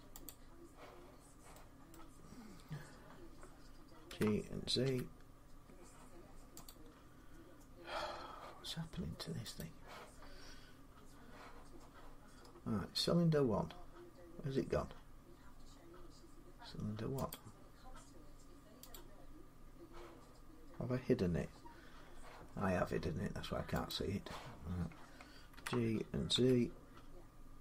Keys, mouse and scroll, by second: 0.0 click, 1.0-1.3 scroll up 3, 1.7 middle click, 2.2 scroll up 1, 3.9-4.6 typing, 6.5 click, 7.1 middle click, 7.1 z, 9.4 click, 12.2-14.0 scroll, 14.0-14.3 scroll, 15.5 scroll, 17.3 middle click, 17.4 click, 18.7 click, 23.7 click, 25.3-26.1 typing.